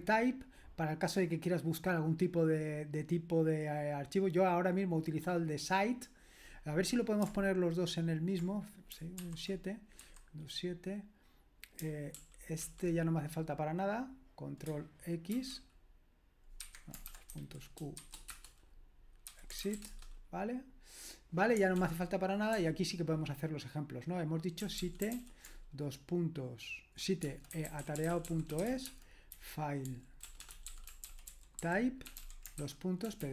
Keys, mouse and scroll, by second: 4.9-7.3 scroll down 1, 7.3-8.4 scroll down 1, 8.4-9.2 scroll down 1, 9.2 super+/, 10.1 super+7, 12.2 super+l, 12.6 super+l, 15.3 ctrl+x, 16.6 Escape, 16.8-18.0 typing, 18.4 Return, 19.0-20.2 typing, 21.7 super+l, 22.6 super+h, 24.3-25.6 typing, 27.2-33.3 typing.